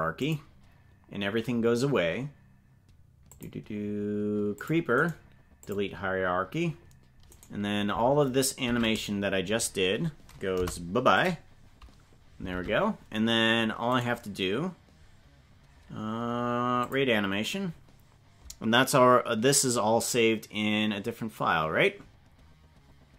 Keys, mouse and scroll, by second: 3.3 click, 4.5 click, 5.0 right click, 7.3 right click, 8.7 ctrl+Tab, 10.6 Delete, 12.5 ctrl+Tab.